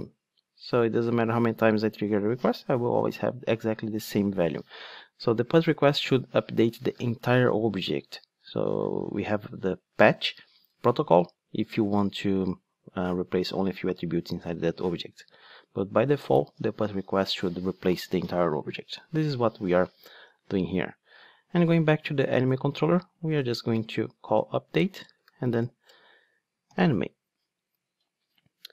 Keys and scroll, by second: 20.4 ctrl+Tab, 24.1 Return, 26.7 alt+super+l.